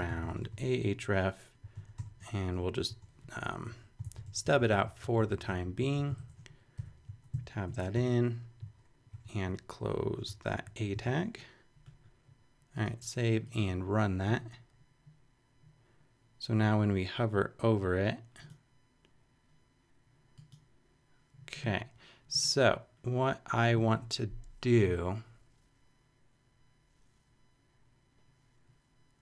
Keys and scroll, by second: 0.0-2.7 typing, 3.7 shift+Down, 4.0 super+Left, 4.3 shift+super+Down, 5.6 shift+super+Down, 6.0 shift+super+Up, 6.7 shift+super+], 7.4 super+], 7.7 super+Right, 7.9 Return, 8.6 super+Return, 9.1 alt+super+., 9.9 alt+shift+super+,, 10.3-11.5 typing.